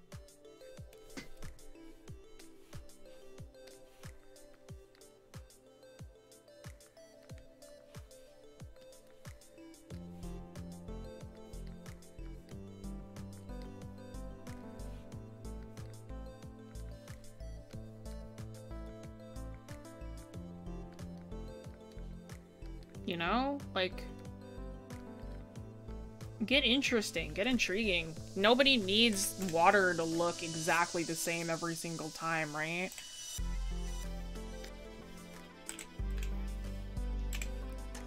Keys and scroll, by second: 7.7 ctrl+z.